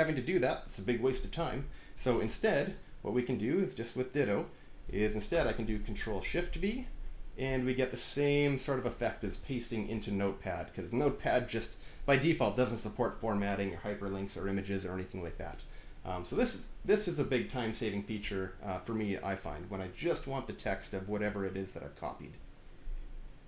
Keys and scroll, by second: 5.2 Return, 5.3 Return, 6.4 ctrl+shift+v.